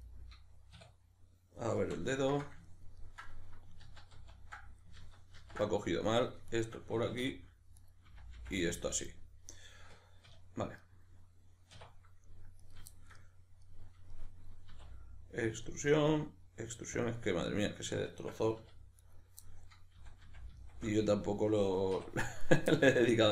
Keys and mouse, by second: 0.8 \, 1.8 KP_Decimal, 3.8 ctrl+z, 5.0 ctrl+z, 6.2 right drag, 6.5 shift+right click, 7.2 f, 7.8 right click, 8.0 f, 8.6-12.6 middle drag, 10.3 \, 11.7 1, 12.6 right drag, 12.9-15.6 shift+middle drag, 14.7 e, 15.6 click, 15.7-17.1 middle drag, 16.1 e, 17.1 click, 17.1-19.0 middle drag, 18.6 2, 19.0 right click, 19.5-22.4 middle drag, 20.0 f, 21.9 1, 22.4 right click, 22.5-23.3 middle drag.